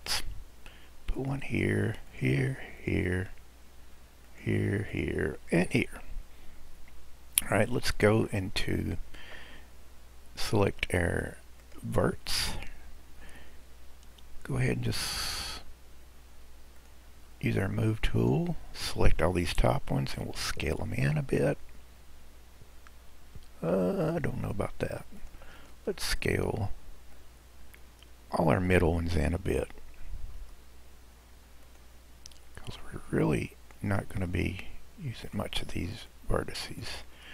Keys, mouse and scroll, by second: 11.7 click, 16.8 click, 20.4 s, 25.6 click, 27.1 click, 30.4 s, 32.9 click, 34.1 s, 36.2 click, 37.2 s.